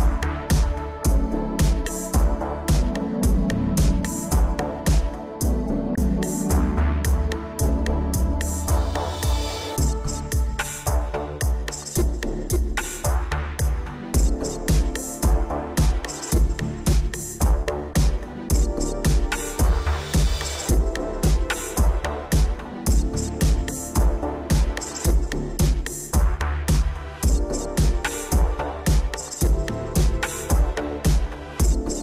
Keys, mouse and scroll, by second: 1.0 Down, 1.4 Up, 2.5 middle click, 3.5 shift+Left, 3.8 shift+space, 4.8 Escape, 6.6 click, 8.6 middle click, 9.2-9.5 scroll up 3, 9.5 middle click, 9.6 middle click, 10.2 Down, 10.4 Down, 10.7 Right, 11.0 Right, 11.5 Right, 13.1 middle click, 14.3 g, 16.7 click, 16.8 click, 17.0 middle click, 17.9 shift+Left, 18.2 shift+space, 19.0 Escape, 19.3 middle click, 19.7 shift+space, 20.9 Escape, 21.4 ctrl+s, 21.5 scroll down 2, 22.0 shift+scroll, 22.1 shift+middle click, 22.2 middle click, 22.3 middle click, 22.8 scroll down 1, 23.1 shift+middle click, 23.2 middle click, 23.4 a, 23.6 scroll down 2, 23.8 shift+middle click, 24.0 middle click, 24.1 middle click, 24.4 shift+space, 26.0 Escape, 26.4 shift+space, 27.2 Escape, 27.5 middle click, 28.5 Escape, 28.8 middle click, 28.8 click, 31.6 scroll up 2.